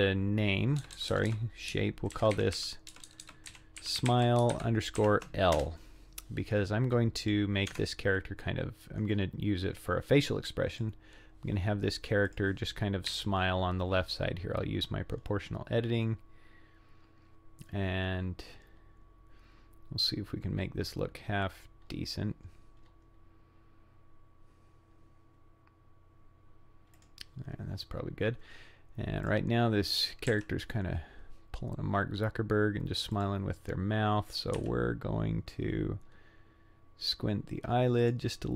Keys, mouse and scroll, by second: 1.0 BackSpace, 1.0-6.2 drag, 1.1 BackSpace, 3.1 BackSpace, 3.2 BackSpace, 7.2 click, 7.7 Tab, 9.0-9.7 scroll up 4, 9.7-10.4 scroll down 3, 10.7 click, 12.3 click, 13.1 g, 29.3-30.3 drag, 30.3 g, 34.3 click, 34.6 g.